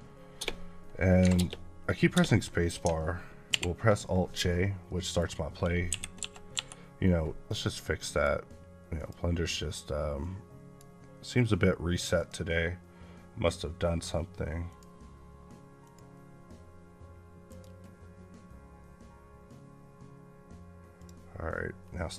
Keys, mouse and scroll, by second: 0.3 space, 1.0 space, 3.3 alt+j, 4.7 middle click, 5.8 KP_1, 8.0 click, 20.8 click, 21.7 scroll up 8.